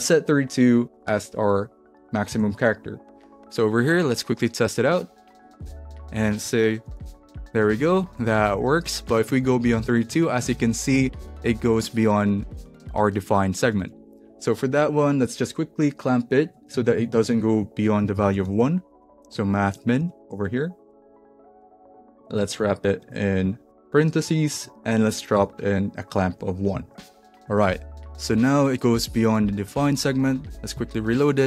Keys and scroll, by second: 0.7-1.4 typing, 2.3 super+s, 6.6-14.3 typing, 16.8 alt+Left, 17.9-22.2 typing, 23.4 alt+shift+Right, 24.0 shift+9, 24.5 Right, 25.3 ,, 25.5 space, 26.1 1, 26.8 super+s, 27.3 super+s, 31.0 super+r.